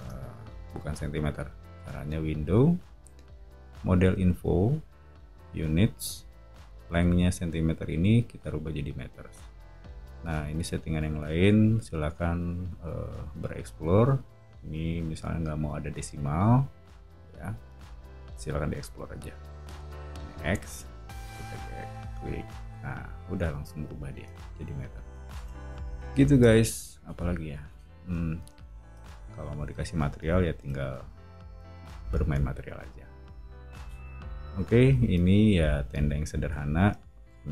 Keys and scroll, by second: 22.1 o.